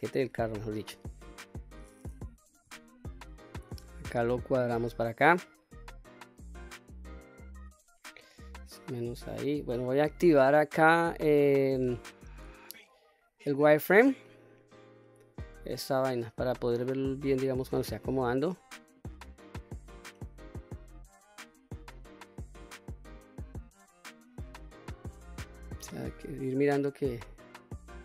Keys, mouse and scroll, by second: 2.1 KP_7, 3.4 ctrl+z, 4.0-7.3 drag, 8.3-9.1 drag, 11.0-16.5 drag, 18.7-19.9 drag, 20.3-21.5 middle drag, 21.5 scroll up 1, 21.8-24.4 middle drag, 24.4-24.7 scroll up 1, 24.7-26.0 middle drag, 26.0-26.4 scroll up 1, 26.7-28.0 drag.